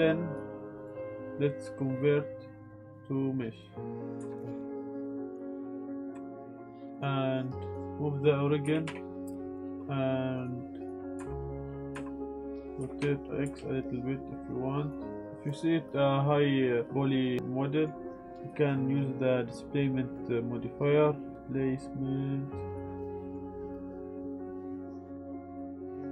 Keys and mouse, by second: 5.3-5.9 drag, 7.0-7.9 drag, 8.6 g, 8.8 y, 9.5 click, 10.4 click, 11.1 Tab, 12.8 r, 13.0 y, 13.4 x, 13.5 x, 14.8 click, 15.1 middle click, 15.2 Tab, 15.7-17.4 drag, 17.4 middle click, 18.5-22.7 drag, 23.2 middle click, 23.9-25.4 drag, 25.5 Tab, 25.9-26.1 drag.